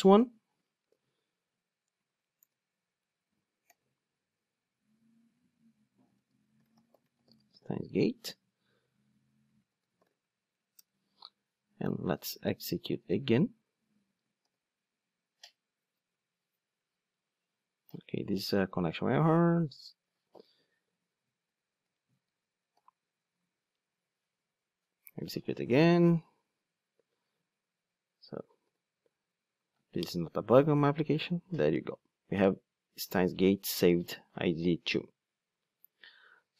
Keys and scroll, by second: 0.9 super+v, 2.4 super+/, 10.8 Return, 14.4 ctrl+d, 21.7 super+z, 22.6 ctrl+d, 28.6 ctrl+d.